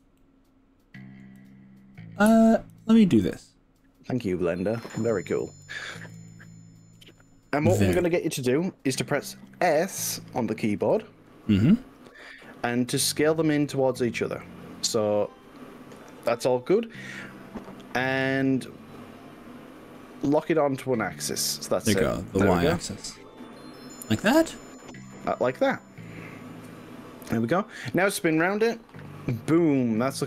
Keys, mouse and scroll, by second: 0.2-1.3 middle drag, 1.5 click, 2.9 alt+click, 4.3 click, 5.7 alt+shift+click, 6.3-7.0 middle drag, 8.1 KP_3, 11.0 s, 18.2 x, 20.3 y, 26.1 click, 26.7 middle click, 27.2-30.2 middle drag.